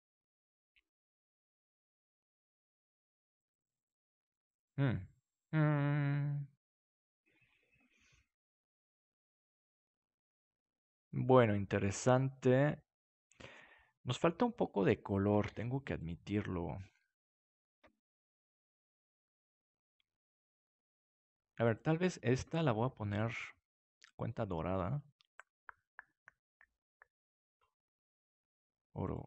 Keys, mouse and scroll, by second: 15.6 ctrl+s, 27.4-29.2 drag.